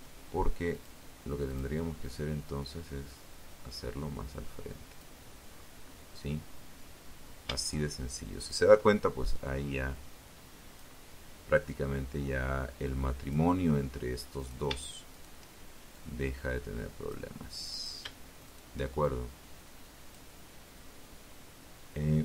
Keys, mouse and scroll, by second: 0.1-3.3 drag, 3.7-4.1 scroll up 1, 5.7 shift+right click, 6.5 shift+right click, 7.5-9.1 drag, 9.8-11.7 drag, 12.5 shift+right click, 13.3 shift+right click, 14.1-15.4 drag, 15.9 shift+right click, 16.6 shift+right click, 17.1-18.5 shift+drag, 20.8 ctrl+r, 22.0 click.